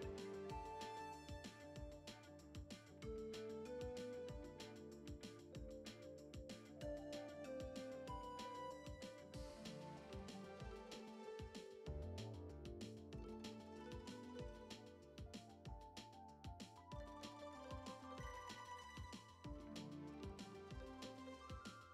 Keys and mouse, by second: 0.2 middle drag, 1.0 a, 1.4 r, 2.5 ctrl+Tab, 4.1-5.8 drag, 5.8 Tab, 6.0 a, 6.5 u, 7.3 a, 8.0 r, 9.1 ctrl+Tab, 10.2 Tab, 10.6 drag, 10.9-11.7 shift+drag, 11.8 shift+drag, 12.0-12.4 shift+middle drag, 12.4-13.3 shift+drag, 13.6-15.1 shift+drag, 15.4-16.6 shift+drag, 16.7-18.9 shift+drag, 19.0-21.3 shift+drag, 21.5 ctrl+Tab.